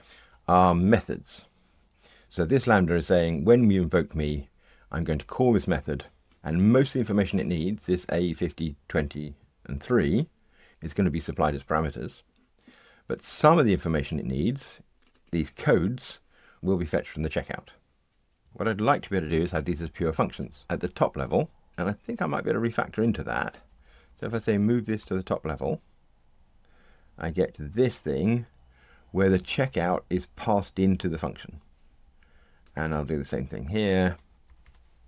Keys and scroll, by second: 22.2 alt+Return, 34.2 alt+Return.